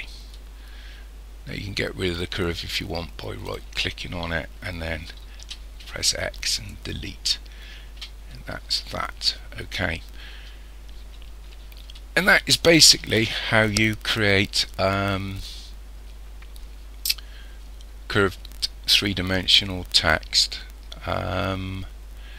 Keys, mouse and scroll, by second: 3.5 right click, 5.4 x, 11.8 KP_1.